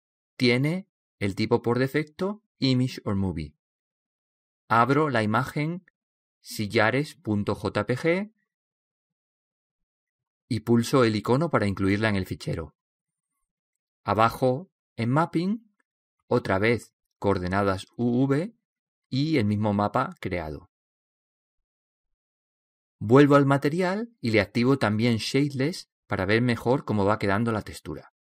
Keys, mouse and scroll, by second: 5.9-6.7 scroll down 2, 6.0 middle click, 6.7 click, 8.1-9.9 drag, 9.1 middle click, 9.3 middle click, 11.7-13.5 drag, 17.4-19.2 drag, 21.2-28.2 drag, 25.1-28.2 middle drag.